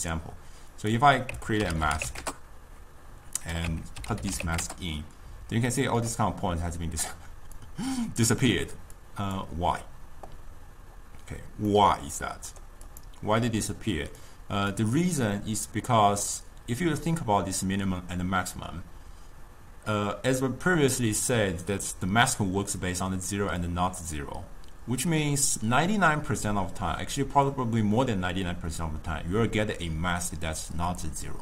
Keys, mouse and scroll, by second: 7.6-11.7 drag, 12.9 click, 14.2-17.3 drag.